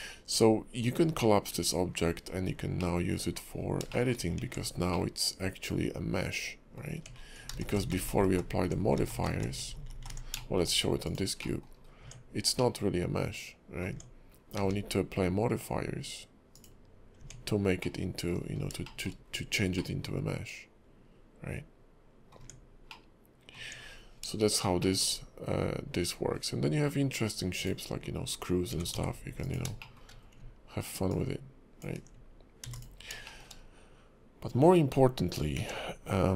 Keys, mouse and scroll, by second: 0.0-0.3 scroll up 2, 0.4-1.1 scroll down 3, 1.1-1.8 scroll up 2, 1.9-2.3 scroll down 1, 2.3-2.8 scroll down 2, 2.8 middle click, 3.5-3.8 scroll up 1, 3.9 shift+middle click, 4.1 scroll up 2, 4.4 Tab, 4.9 middle click, 6.9 Tab, 7.1 scroll down 5, 7.6-9.8 ctrl+z, 10.0 ctrl+z, 10.6 shift+middle click, 10.6-11.0 scroll up 3, 11.0 click, 11.4 middle click, 11.7 scroll up 2, 12.0 Tab, 12.6 middle click, 13.9 Tab, 14.3 scroll down 1, 14.6 q, 17.2 Tab, 17.8 middle click, 18.4-19.8 scroll up 5, 18.8 shift+middle click, 19.8 middle click, 22.4 Tab, 22.9 middle click, 23.6 Tab, 23.9-24.3 scroll down 8, 24.8 shift+middle click, 26.2 scroll up 2, 27.5 click, 28.7 g, 29.8 shift+middle click, 30.1 scroll up 1, 31.1 ctrl+click, 32.6 x, 33.3 shift+middle click, 33.5-34.2 scroll down 3, 35.5 shift+a.